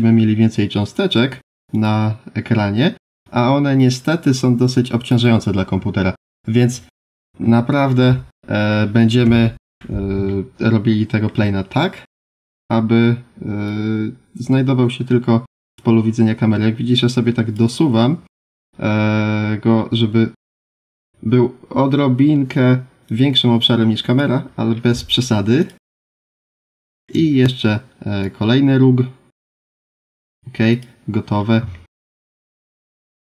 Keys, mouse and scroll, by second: 1.7 click, 3.2 click, 6.2 scroll down 1, 6.7-8.3 scroll down 2, 8.3 middle click, 9.2 KP_7, 10.2 shift+middle click, 12.1 1, 12.3 click, 13.6 click, 18.9-20.3 scroll up 5, 23.0 click, 24.5-25.0 scroll down 4, 25.5 click, 26.1 shift+middle click, 28.2 click, 30.7 click, 31.2-31.6 scroll up 3, 31.7 shift+middle click, 32.5 scroll down 2.